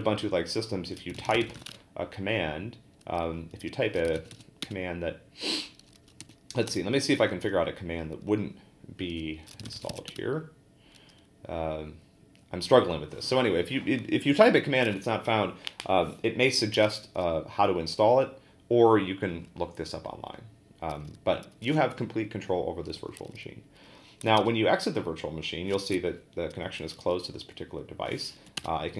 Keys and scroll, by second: 0.8-2.1 typing, 3.8-4.8 typing, 6.2 g, 6.7 BackSpace, 9.3-10.5 typing, 24.4 ctrl+d, 28.4 Up, 28.6 Return.